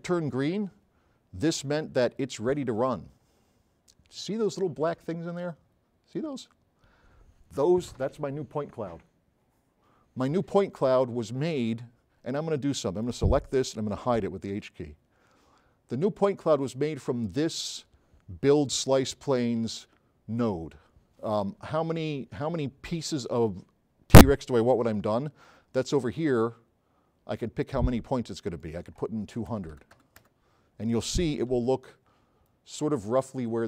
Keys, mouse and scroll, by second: 2.1 scroll up 2, 3.0-3.4 scroll up 4, 4.4 middle click, 4.5 scroll up 2, 4.6 middle click, 5.1-5.4 scroll up 4, 11.3-11.9 scroll down 6, 13.1 click, 14.0 click, 14.6 h, 16.6 click, 26.2-28.0 drag, 28.0 click, 29.5 KP_2, 29.8 KP_0, 30.4 KP_Enter, 31.7 s, 32.5-33.0 right drag.